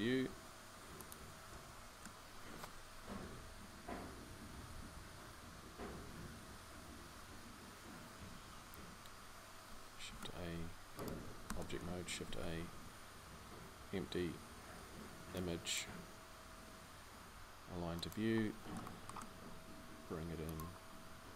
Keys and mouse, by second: 2.6 middle click, 3.1 KP_1, 5.7 KP_5, 9.9 shift+a, 11.3 Tab, 12.0 shift+a.